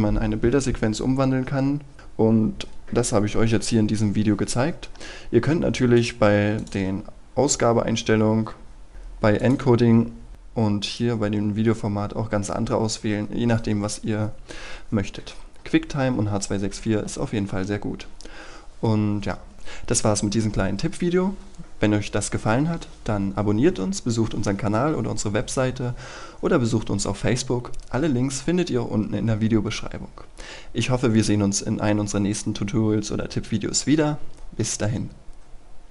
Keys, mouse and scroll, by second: 9.8-10.8 scroll down 1, 10.8 click.